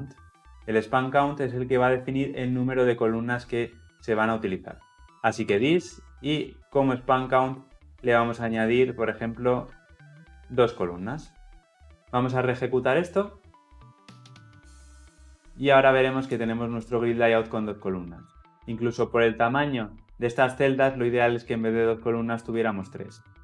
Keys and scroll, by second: 13.8 shift+F10.